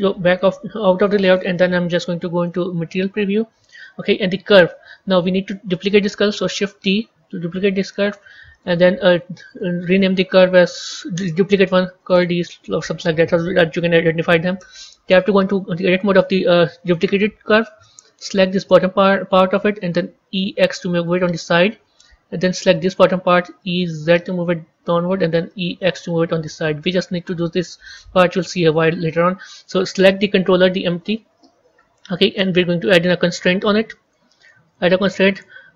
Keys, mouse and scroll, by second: 0.9-2.7 scroll down 1, 3.1 z, 4.6 click, 6.8 shift+d, 9.4-14.1 drag, 15.0 b, 15.6-17.9 scroll up 8, 18.2 click, 18.6-20.2 scroll down 7, 22.7 click, 28.5 Tab, 30.7 click.